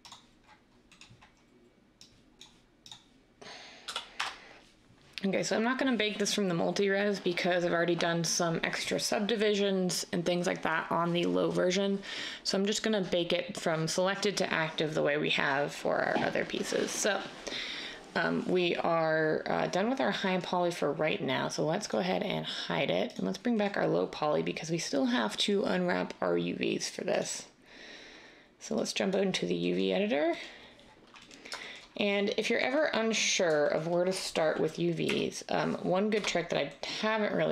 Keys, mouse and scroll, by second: 3.8 typing, 4.1 Return, 35.0 \, 36.1 Tab.